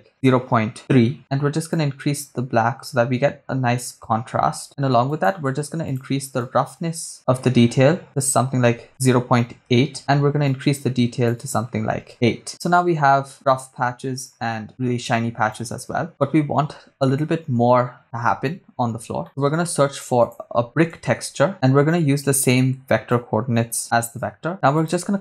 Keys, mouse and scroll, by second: 1.7-4.6 drag, 5.1 click, 6.5-10.0 drag, 10.5-12.1 drag, 13.3-14.5 drag, 15.5 click, 19.2 middle click, 19.2 scroll down 1, 19.6 shift+a, 21.8 scroll down 2, 23.1-23.8 drag, 24.2 click, 24.5 middle click, 24.5 scroll up 3, 24.8 click.